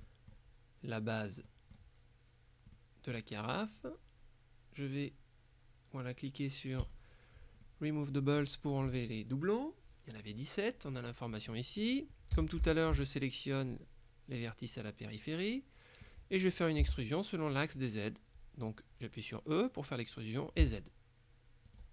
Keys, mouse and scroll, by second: 1.6 middle click, 2.8 middle click, 6.9 click, 7.7 middle click, 11.6 middle click, 12.4 a, 12.8 alt+shift+right click, 14.9 middle click, 15.3 right click, 16.9 e, 20.7 z, 21.8 click.